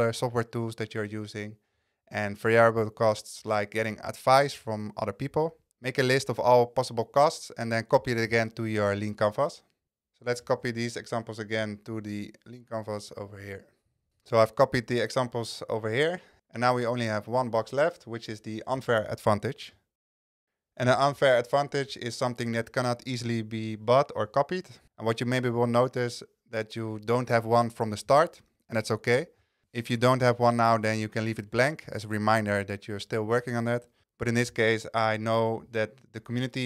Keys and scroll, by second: 10.5 super+c, 34.0 super+z, 34.4 super+v.